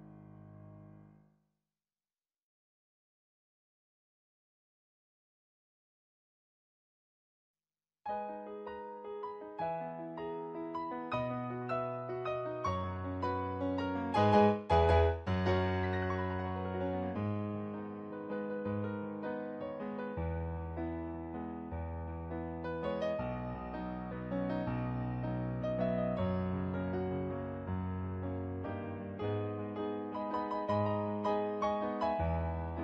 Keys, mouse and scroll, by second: 14.3 ctrl+z, 16.1 ctrl+z, 16.7 ctrl+z, 16.9 ctrl+z, 17.5 ctrl+z, 17.7 ctrl+z, 18.3 ctrl+z, 18.5 ctrl+z, 22.0 ctrl+z, 22.2 ctrl+z, 25.4 ctrl+z, 26.2 ctrl+z, 26.6 ctrl+z, 27.8 ctrl+z, 28.2 ctrl+z, 28.8 ctrl+z, 29.0 ctrl+z, 29.2 ctrl+z, 30.8 ctrl+z, 31.2 ctrl+z, 31.4 ctrl+z, 32.0 ctrl+z.